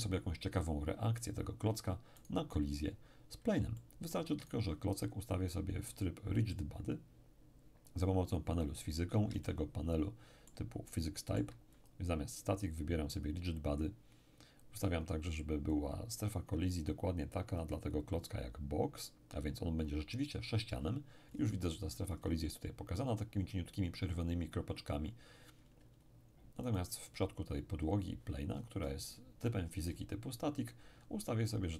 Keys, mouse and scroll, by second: 2.2 right click, 3.7 shift+middle click, 4.4-5.5 shift+drag, 5.5-6.5 middle drag, 6.5 click, 9.4-12.8 ctrl+middle drag, 11.7 ctrl+click, 13.1 click, 14.7-16.5 scroll down 1, 16.5-17.5 scroll down 1, 17.5 click, 21.3-23.1 scroll up 1, 25.1-26.7 scroll down 1, 26.7 right click, 28.5-30.9 scroll up 1, 30.9-31.7 scroll down 2.